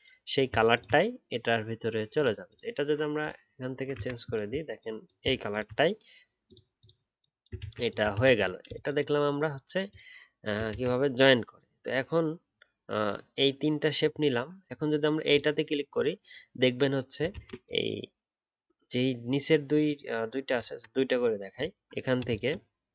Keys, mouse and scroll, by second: 0.7 shift+click, 5.5 shift+click, 7.6 ctrl+z, 8.1 ctrl+z, 10.7 ctrl+z, 17.3 ctrl+z, 21.7-22.3 alt+scroll up 1.